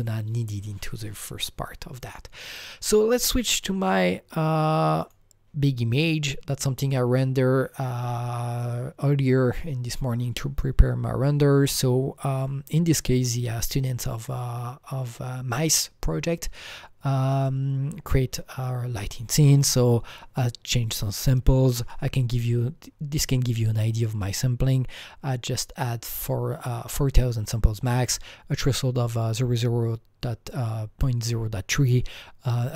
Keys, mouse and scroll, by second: 3.5 click, 3.6 click, 5.2 click.